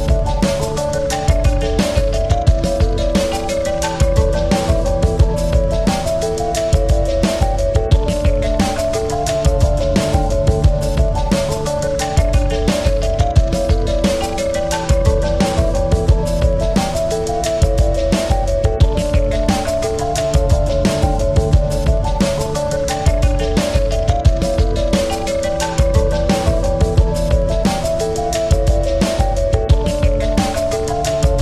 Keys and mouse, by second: 0.3 click, 0.4 space, 1.0 click, 1.2 space, 2.0 ctrl+=, 2.4 space, 3.5 click, 3.7 space, 4.0 click, 4.1 space, 5.2 click, 6.6 space, 6.7 click, 7.0 space, 8.0 right click, 8.0 right click, 8.9 click, 9.6-12.1 shift+drag, 13.0 shift+click, 13.3 ctrl+-, 14.6 space, 14.8 click, 15.1 space, 16.2 click, 17.4 click, 18.4 click, 19.4-23.7 drag, 23.8 space, 24.0 click, 24.3 space, 24.8-27.1 drag, 28.8 click, 31.3 click.